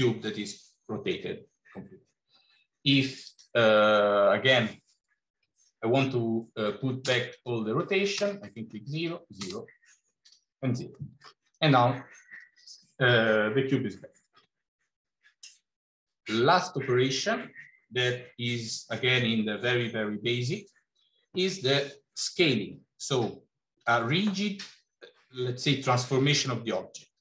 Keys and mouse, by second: 3.0-7.4 drag, 7.6 click, 8.9-10.3 drag, 10.8 middle click, 13.6 middle click.